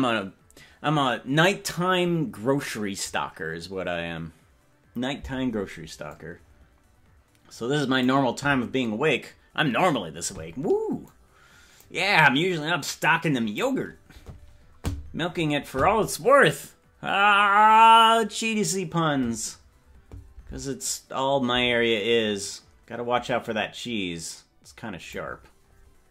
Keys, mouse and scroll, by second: 6.2-8.3 drag, 11.1 click, 12.3-13.7 drag, 23.5-25.4 drag.